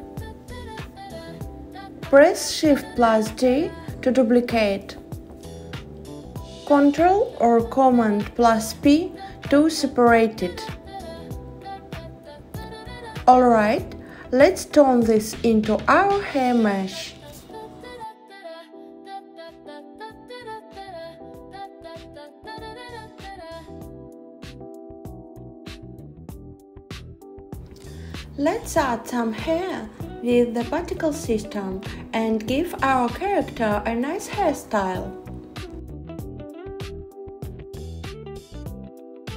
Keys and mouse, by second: 6.5 shift+d, 8.2 click, 14.5-15.9 drag, 17.7 super+z, 20.4 shift+d, 26.7 click, 29.1 click, 30.4 click, 34.3-34.8 drag, 35.2 click, 39.0-39.3 drag.